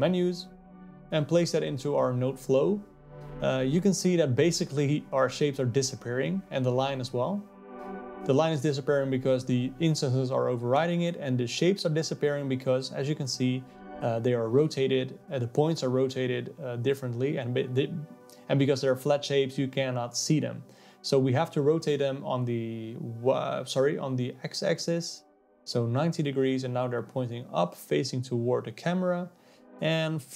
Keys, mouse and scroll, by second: 0.4-2.9 drag, 6.4 click, 6.8 click, 8.2 click, 9.8-21.3 alt+middle drag, 21.3-25.3 drag, 25.3 KP_0, 26.9-27.3 scroll up 5, 28.3 z, 30.2 click.